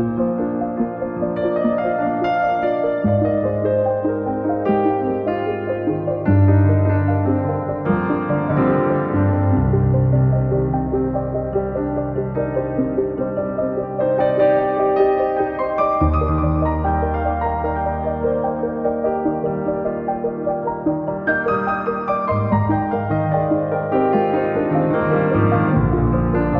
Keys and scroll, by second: 0.1 p, 0.9 space, 1.1 Escape, 2.5 q, 5.4 s, 7.2 space, 7.5 Escape, 8.9 l, 12.8 space, 13.1 Escape, 14.0 m, 16.4 space, 17.0 Escape, 26.0 Escape, 26.5 space.